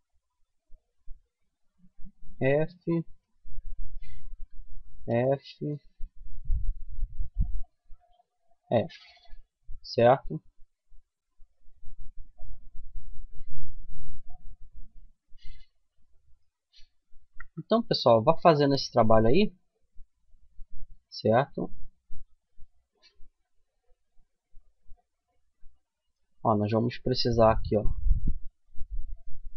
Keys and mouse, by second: 1.5 f, 4.1 f, 4.5 middle click, 4.7 right click, 7.3 right click, 7.6 f, 8.1-9.3 middle drag, 9.3 Tab, 12.1 middle click, 14.3-17.4 middle drag, 16.5 Tab, 19.7-23.8 middle drag, 26.9-29.3 middle drag, 29.3-29.5 right drag.